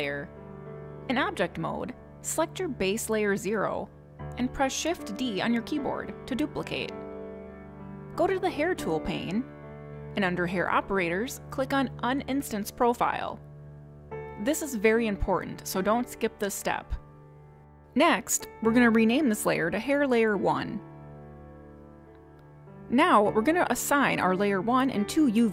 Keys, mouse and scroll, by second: 3.2 click, 7.3 shift+d, 9.4 click, 10.5 click, 14.0 click, 19.5 click, 19.7 click, 24.5 click.